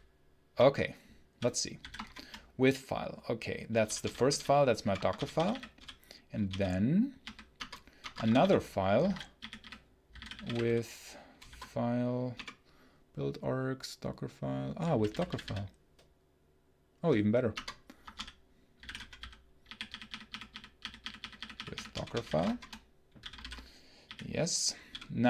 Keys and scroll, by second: 0.0-0.4 typing, 1.6 f, 1.9 shift+0, 3.5-7.1 typing, 7.5 Return, 7.9 Return, 8.0 Escape, 8.1-12.2 typing, 8.9 ctrl+d, 14.8 Down, 17.4 Return, 17.9 Escape, 18.0-24.7 typing, 23.3 ctrl+j.